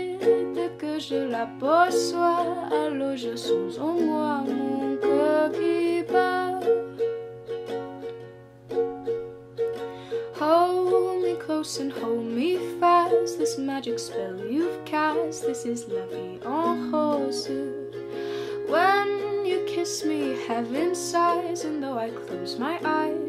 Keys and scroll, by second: 8.6 s, 22.0-23.2 typing.